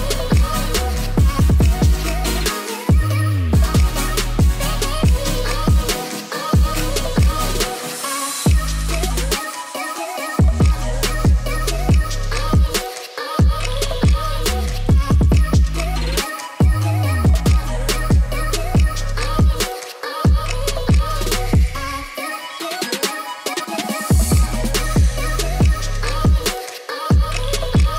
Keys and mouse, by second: 0.5-0.9 middle drag, 1.5 click, 3.8 middle drag, 4.1 shift+middle click, 4.8 click, 8.4 click, 9.1-11.2 drag, 12.1 ctrl+s, 14.1 click, 14.4 click, 19.2-21.5 drag, 23.8 click, 24.6 Tab, 25.0 click, 25.3 shift+middle click, 26.2 z, 27.6 i.